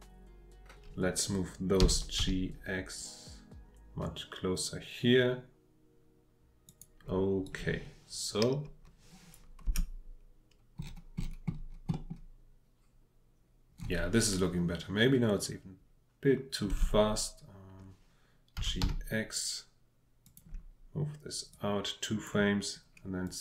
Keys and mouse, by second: 1.8 g, 2.2 x, 6.6 click, 7.4-9.3 drag, 9.6 space, 11.9 click, 16.7 space, 18.5 g, 18.8 x, 20.2 click, 21.5 click, 23.2-23.4 drag.